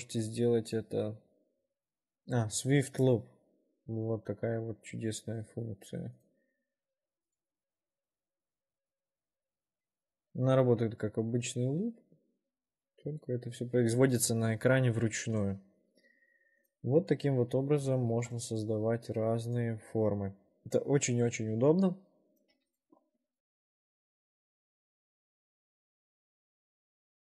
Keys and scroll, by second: 18.3 ctrl+r, 24.1 w, 25.7 4.